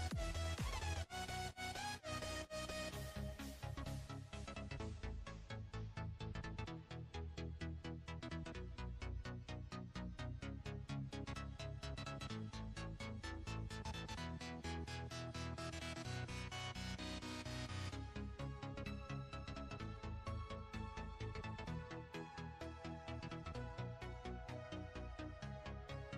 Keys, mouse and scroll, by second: 0.1 click, 8.8 KP_7, 9.6-10.6 scroll down 4, 10.6-11.4 drag, 11.4-11.8 scroll up 4, 12.8 shift+a, 14.6 scroll down 1, 15.4 click, 16.1 scroll up 9, 17.2 s, 18.4 click, 21.0 click, 21.9-22.4 scroll up 5, 23.1-24.8 drag.